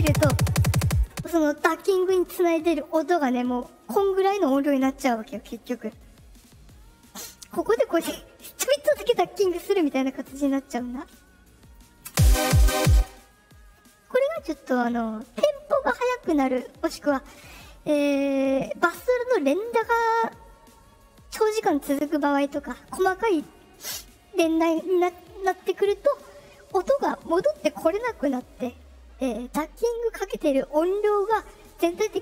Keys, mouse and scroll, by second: 3.6 click, 5.1 click, 7.5-10.4 drag, 11.0 right click, 11.6 click, 12.0 space, 12.8 space.